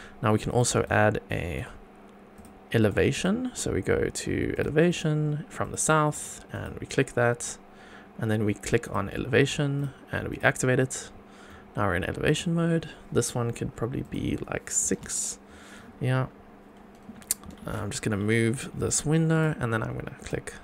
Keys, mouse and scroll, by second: 0.5 click, 0.8 shift+right click, 2.3-2.8 drag, 3.1-4.6 drag, 4.8 click, 6.5 click, 7.4 scroll down 2, 8.8 click, 9.7 click, 10.3 click, 11.4 scroll up 2, 12.2 click, 13.1 scroll up 1, 14.0-15.0 drag, 15.8 scroll up 2, 16.2 scroll down 2, 17.4 g, 17.6 z, 18.7 click, 19.3 click, 20.2 click.